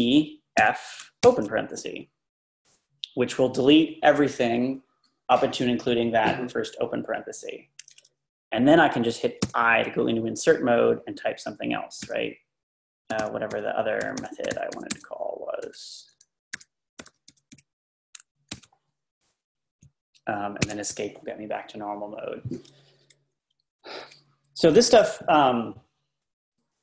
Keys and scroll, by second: 0.6 f, 9.5 i, 12.0-17.0 typing, 18.5 typing, 20.6 Escape, 23.9 Left, 24.0 Left, 24.7 Right, 24.9 Right.